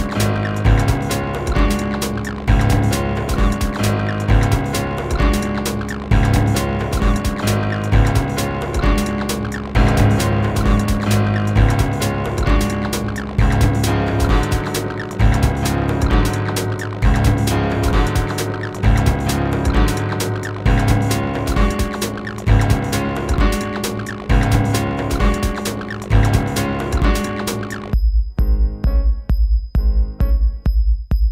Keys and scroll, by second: 16.9 q, 26.7 w.